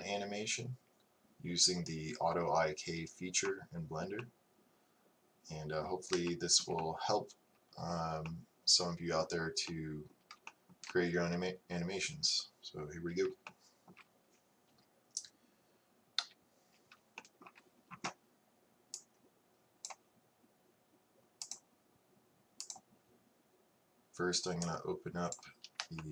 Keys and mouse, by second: 21.5 click, 22.0-25.4 drag.